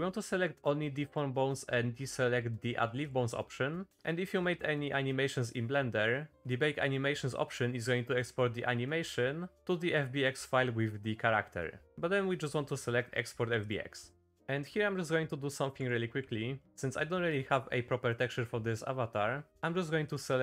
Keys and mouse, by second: 14.3 middle click, 15.0 middle click, 15.8 Tab, 16.2 3, 16.6 shift+middle click, 17.2 middle click, 18.6 middle click.